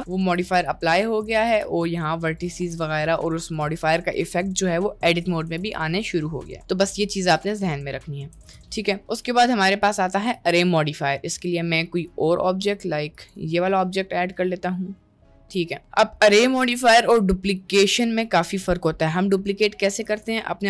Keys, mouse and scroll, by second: 0.0 g, 0.6 g, 1.5 g, 2.6 g, 3.5 click, 3.6 g, 5.4 Tab, 6.6 Delete, 8.0 middle click, 8.3 Delete, 10.2 shift+a, 13.7-15.0 middle drag, 15.4 middle click, 15.8 middle click, 16.2 middle click, 20.1 click.